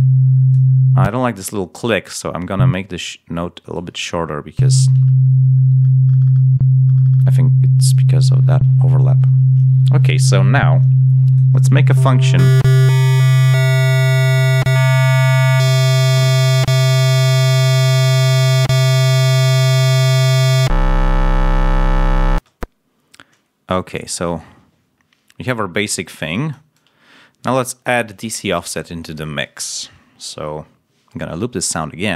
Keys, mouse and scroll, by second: 0.9 space, 1.8 ctrl+scroll up 1, 4.5 l, 4.9-5.6 ctrl+scroll down 4, 17.9 click, 18.6 click, 19.2 click, 19.6 click, 22.2 space, 26.7-27.9 drag.